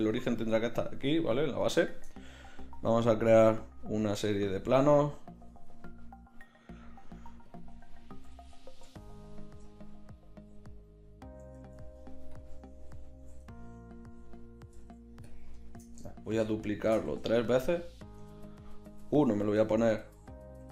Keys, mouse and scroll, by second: 1.9 shift+a, 7.5-11.5 drag, 11.5 g, 14.8 g, 15.6 drag, 16.3 shift+d, 17.1 shift+d, 18.2 KP_3, 18.9 r.